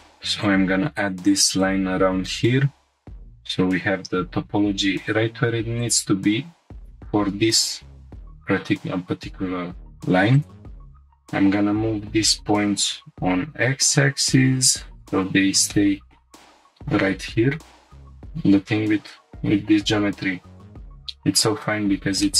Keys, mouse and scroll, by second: 0.4 click, 1.6 click, 2.6 g, 2.9 g, 5.8-6.3 drag, 6.8 g, 6.9 g, 8.0 click, 8.5 g, 8.6 g, 10.3-10.8 drag, 10.9 shift+click, 11.7 g, 12.0 y, 12.9 x, 15.1 click, 15.7-16.2 shift+middle drag, 16.4 scroll up 1, 18.0 ctrl+t, 18.0 ctrl+r, 22.2 shift+middle click.